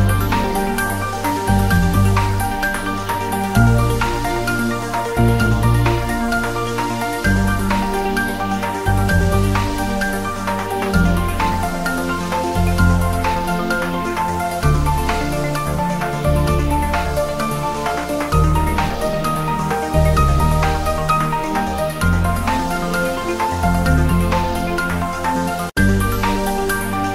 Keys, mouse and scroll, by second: 0.2 click, 0.8 scroll up 1, 1.4 r, 3.3 click, 3.7 scroll down 1, 4.6 click, 5.9 Tab, 6.8 alt+e, 7.4 click, 7.8 a, 8.2 alt+e, 8.4 click, 9.9 click, 10.0 Tab, 10.2-10.8 scroll up 2, 11.0 ctrl+3, 11.2 scroll up 1, 11.3 Tab, 11.8 ctrl+r, 11.9 click, 12.8 ctrl+d, 12.9 ctrl+z, 13.3 ctrl+r, 13.5 click, 14.8 ctrl+r, 15.0 click, 15.7-16.1 scroll down 1, 16.2 ctrl+r, 16.4 click, 17.2 ctrl+r, 17.5 click, 17.9-18.5 scroll up 1, 18.9 click, 19.4 3, 20.3 ctrl+r, 20.8 scroll down 1, 21.0 click, 21.4 ctrl+z, 21.8 click, 22.1 ctrl+z, 22.4 click, 22.7 scroll down 1, 23.2 ctrl+r, 23.4 click, 24.2 click, 25.0 g, 26.6 click, 26.8 ctrl+z.